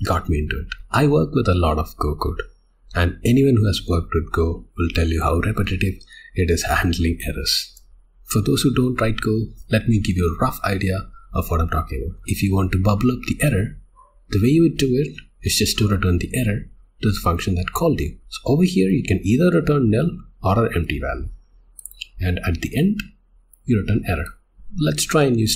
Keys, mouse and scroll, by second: 12.2 Escape, 18.2 Escape, 21.7 click, 22.8 click, 23.5 click, 24.2 click, 24.6 click.